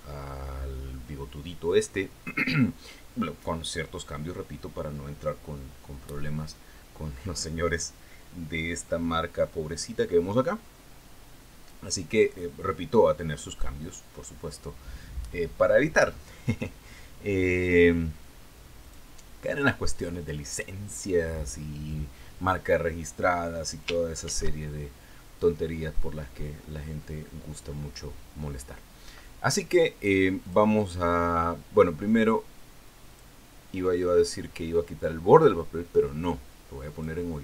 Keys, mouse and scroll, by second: 2.0 scroll up 2, 3.6-4.1 scroll down 3, 20.4 click, 25.7 ctrl+shift+d, 32.0 click, 34.6 click.